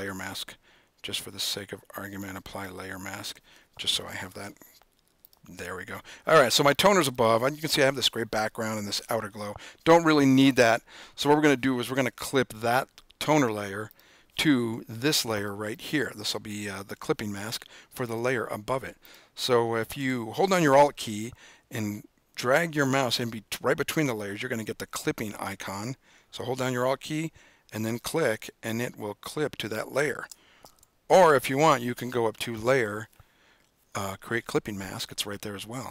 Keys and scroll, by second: 30.9 super+z.